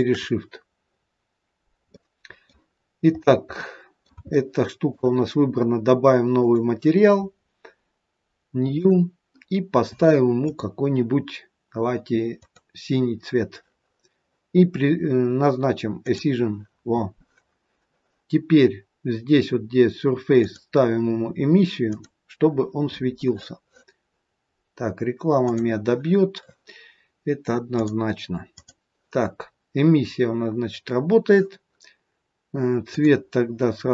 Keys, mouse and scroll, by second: 1.0-2.0 scroll down 2, 2.0 middle click, 2.0-2.4 scroll down 1, 2.7-3.6 scroll down 3, 3.6 middle click, 4.2 shift+middle click, 6.3 click, 8.6 click, 10.3 click, 16.0 click, 20.3 click, 27.8 click, 29.5-30.8 scroll down 5, 32.8 click.